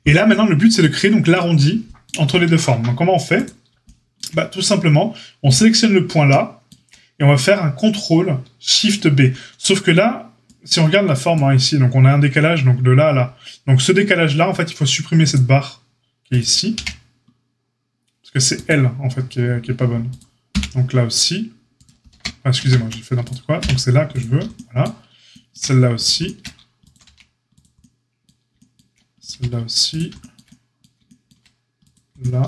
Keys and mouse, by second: 3.4-5.5 shift+drag, 5.5-15.3 middle drag, 15.3-16.3 drag, 16.3-20.0 middle drag, 16.7 x, 20.0 click, 20.1-23.1 middle drag, 20.4 x, 22.0 ctrl+z, 22.5 ctrl+z, 23.1 click, 23.2-32.4 middle drag, 23.5 x, 26.8 ctrl+click, 27.0 x, 29.1 click, 29.2 x.